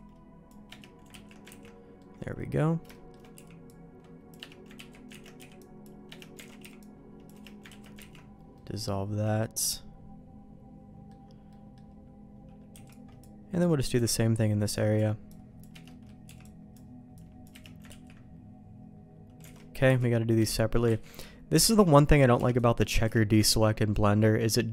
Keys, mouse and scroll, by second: 1.0 ctrl+q, 1.4 ctrl+x, 1.9 middle click, 2.8 shift+middle click, 4.0 c, 4.7 ctrl+q, 5.0 ctrl+x, 5.3 b, 6.0 Escape, 6.3 alt+a, 6.5 c, 7.6 ctrl+q, 7.9 ctrl+x, 8.5-11.0 middle drag, 11.4 middle click, 12.7 c, 15.8 middle click, 16.2 c, 17.8 ctrl+q, 19.4 alt+a, 19.8 c, 21.0 ctrl+q, 21.6 ctrl+x, 22.3 c, 23.4 ctrl+q, 23.9 middle click, 24.6 middle click.